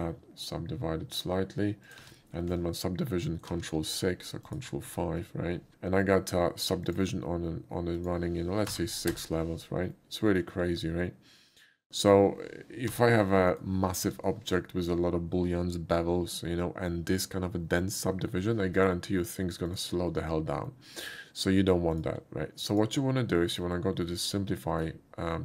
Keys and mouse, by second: 1.9 click, 2.0 Tab, 4.5 click, 6.8 click, 7.9 click, 9.0 6, 9.1 Return, 9.9-10.4 middle drag, 13.2 b, 13.5 right click, 14.0 n, 18.8 click, 19.7 click, 20.7-21.4 middle drag, 21.9 click, 22.7 click, 23.4 middle click, 24.1 shift+middle click, 24.6 shift+middle click.